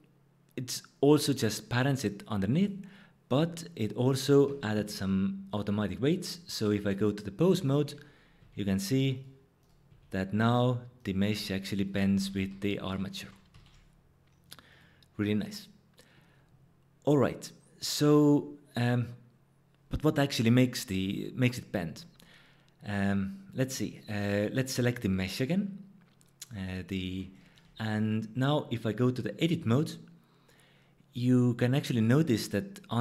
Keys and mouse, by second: 5.5-7.0 drag, 8.4 r, 9.9 r, 10.5 click, 11.2 r, 12.2 ctrl+z, 12.5 ctrl+z, 12.8 ctrl+z, 13.2 ctrl+z, 13.5 ctrl+z, 14.4 click, 14.8 click, 23.0 click, 24.3 click, 28.4-29.6 drag.